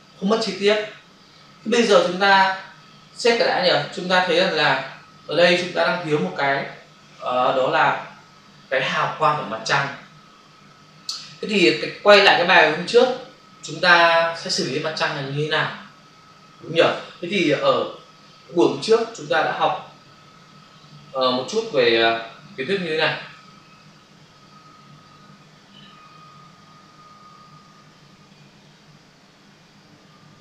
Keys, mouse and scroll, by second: 4.0 ctrl+s, 17.9 alt+Tab, 23.1 shift+F5, 24.8-30.4 scroll up 1.